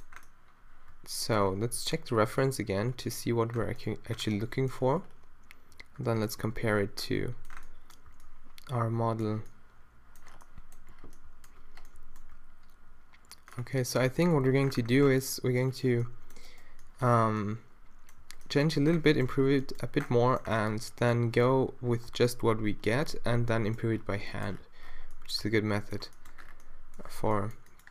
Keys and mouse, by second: 1.8 2, 2.3 2, 2.5 3, 6.1 1, 6.5 shift+2, 8.1 a, 16.5 middle click, 17.2 z, 18.2 z, 25.4 Tab, 27.2 z.